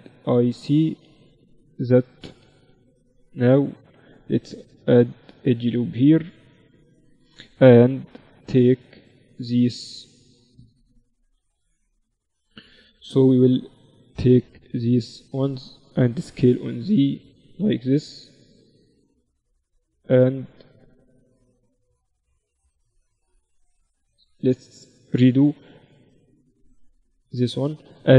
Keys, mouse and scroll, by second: 0.6-1.9 right drag, 1.1 a, 1.9 v, 2.9 b, 4.5 ctrl+r, 6.4 a, 8.3 b, 16.2 s, 22.1 ctrl+r, 23.9 ctrl+z, 25.3 ctrl+r, 27.9 q.